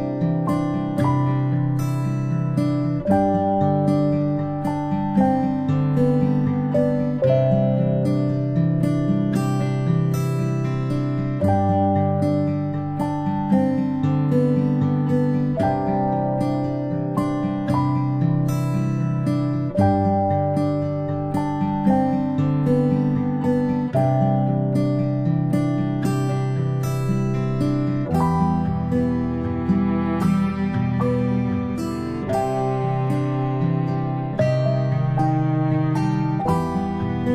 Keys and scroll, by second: 2.2 ctrl+shift+g, 3.3 ctrl+], 12.9 ctrl+Right, 13.2 Left, 26.8 ctrl+shift+z.